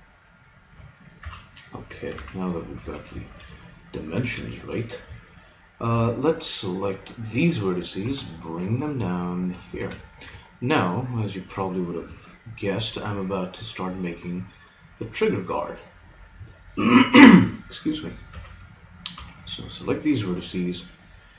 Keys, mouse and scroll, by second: 1.2 KP_3, 2.2 z, 2.8 a, 6.0 b, 8.0 g, 9.8 a, 10.0-12.8 middle drag, 18.4 b, 19.2 b.